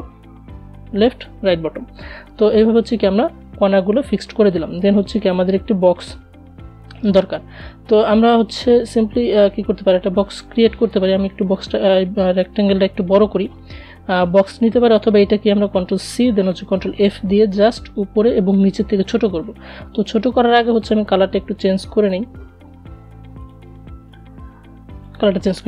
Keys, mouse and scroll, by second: 7.5 click, 9.4 alt+Num_Lock, 11.0-14.3 alt+drag, 14.3 ctrl+c, 14.8 ctrl+f, 18.8 click, 21.7 click.